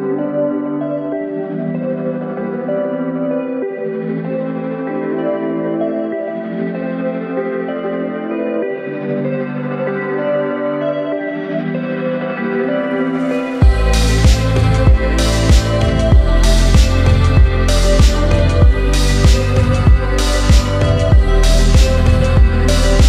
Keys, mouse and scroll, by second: 0.8 click, 1.0 click, 1.6 click, 2.3 click, 2.3 right click, 3.3-3.9 middle drag, 4.3 scroll up 1, 5.1 Tab, 7.9 click, 9.2 alt+click, 10.2 alt+shift+click, 11.3 alt+shift+click, 12.0 alt+shift+click, 13.5-16.5 drag, 13.5 right click, 16.8 Tab, 17.1 click, 17.7 click, 19.0 click, 21.6 Tab, 22.8 Tab.